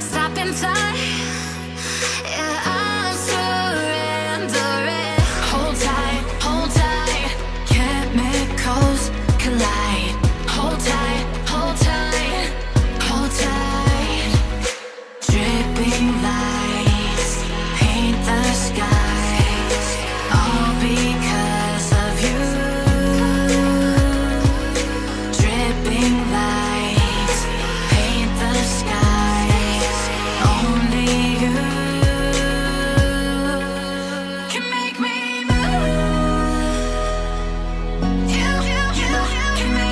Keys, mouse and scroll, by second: 0.3 shift+middle click, 5.6-7.2 scroll up 3, 8.5-8.9 scroll down 1, 9.0 shift+middle click, 13.9 shift+middle click, 14.6-15.5 scroll up 3, 15.5 Caps_Lock, 16.0 Tab, 17.0 scroll down 1, 17.3 shift+middle click, 18.3 scroll up 3, 25.7-26.1 scroll down 2, 26.8 scroll down 5, 27.4-27.9 scroll down 7, 27.9-29.2 scroll up 3, 30.8 shift+middle click, 33.2 Tab, 33.4 Tab, 36.0 shift+middle click.